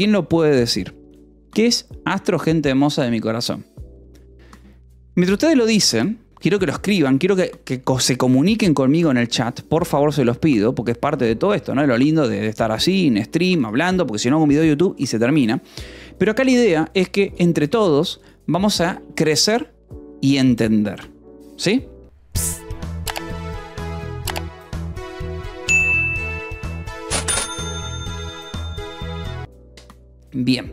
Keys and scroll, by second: 0.0-0.6 typing, 15.6 Delete, 29.4 Delete.